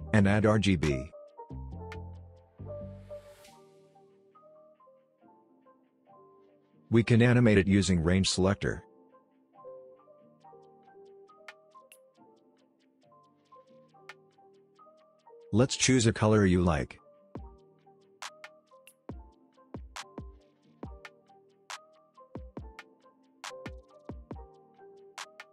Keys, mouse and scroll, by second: 1.2-3.8 drag.